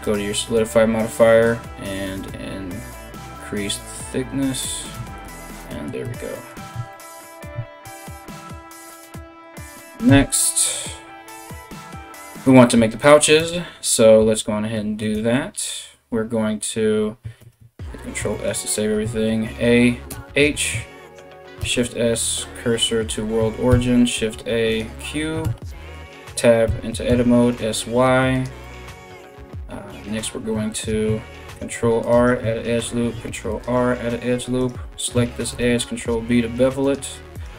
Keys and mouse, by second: 4.5 Tab, 4.8 z, 5.7 Tab, 6.2 Tab, 6.3 Tab, 7.1 a, 7.2 a, 9.7 KP_1, 17.0 ctrl+s, 18.6 a, 19.7 h, 21.2 shift+s, 22.7 shift+s, 23.3 shift+a, 25.0 Tab, 26.2 s, 29.3-37.5 middle drag, 31.0 ctrl+r, 32.8 ctrl+r, 34.2 right click, 35.1 ctrl+b, 36.9 right click.